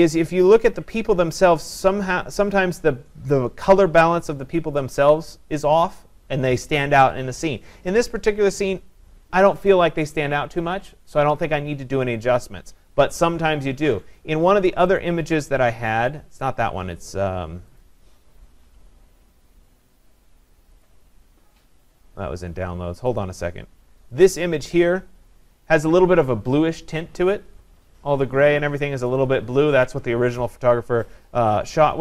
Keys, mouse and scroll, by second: 15.0 click, 16.4 click, 17.2 click, 20.0 click, 20.8 click, 22.2-22.8 scroll, 22.8 scroll, 23.2 click, 24.3 click, 24.4 click.